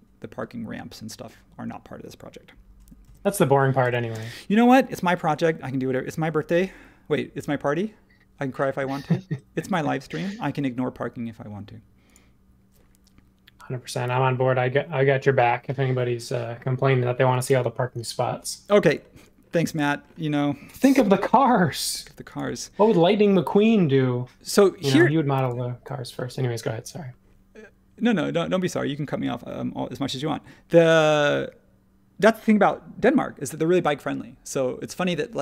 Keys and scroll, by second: 3.0 super+z, 3.8 super+z, 21.1 |, 24.6 ⟲, 25.3 h, 28.2 space.